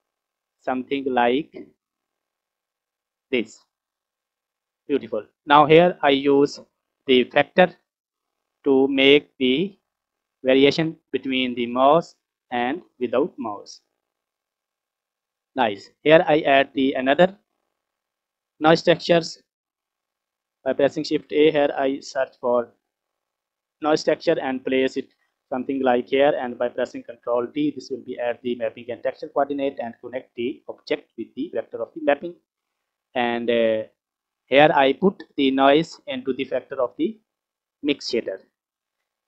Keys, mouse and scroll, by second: 4.1 click, 4.8-5.2 scroll down 2, 5.2 middle click, 6.0 scroll up 2, 7.5 click, 7.9 click, 10.1 click, 10.3 click, 11.3-13.9 drag, 14.9 ctrl+z, 15.6-16.1 scroll down 4, 16.1 middle click, 17.0-17.5 scroll up 3, 17.5 scroll down 1, 17.6 middle click, 18.2 scroll down 2, 20.2 shift+a, 24.8 scroll up 2, 25.4 middle click, 27.4 ctrl+t, 28.2 middle click, 28.2 scroll down 1, 30.4 click, 30.6-31.8 drag, 32.7 middle click, 33.2-33.8 scroll up 3, 33.8 middle click, 34.9-38.2 drag.